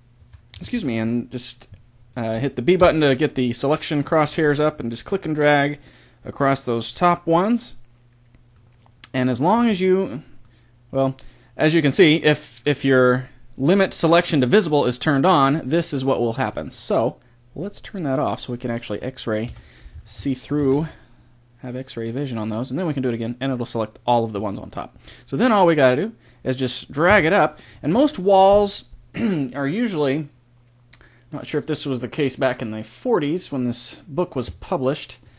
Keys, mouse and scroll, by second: 0.2 a, 0.5 a, 0.7 b, 2.7 b, 8.7-10.8 middle drag, 17.6 click, 18.1-19.4 middle drag, 19.4 KP_1, 20.5 a, 20.7 b, 27.1 KP_1.